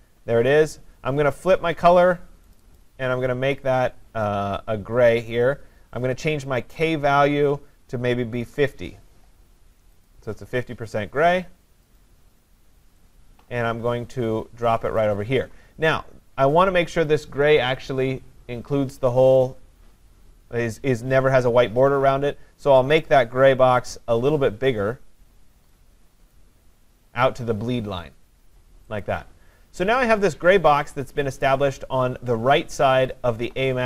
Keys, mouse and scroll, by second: 1.5 click, 2.6 click, 2.8 click, 6.9 click, 8.4-8.8 typing, 10.1 click, 12.0 click, 15.0 click, 23.8 click, 26.3 click, 29.0-33.8 click, 32.1 click.